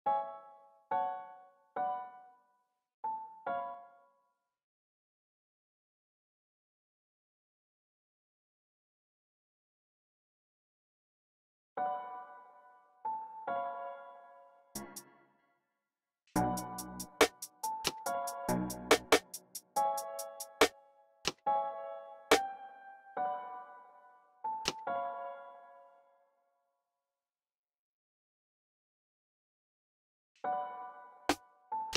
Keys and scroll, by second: 4.3 space, 11.3 typing, 12.9-16.4 typing, 17.7-20.6 typing, 21.6 typing, 23.5 typing, 24.7 typing, 26.0-26.3 typing, 27.8-30.2 typing.